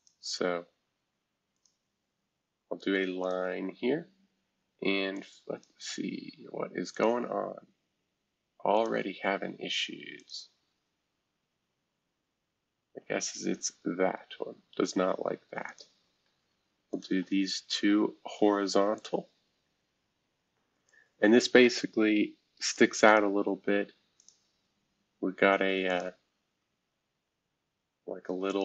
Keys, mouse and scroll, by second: 0.0-2.2 drag, 2.2-3.2 scroll down 1, 2.3-8.5 drag, 3.9 Escape, 8.7-11.8 drag, 13.0 Delete, 15.6-18.3 drag, 18.3 h, 18.9 click, 19.3 scroll down 1, 20.8-22.8 drag, 23.0 click, 24.1 click, 25.9 click, 28.5 click.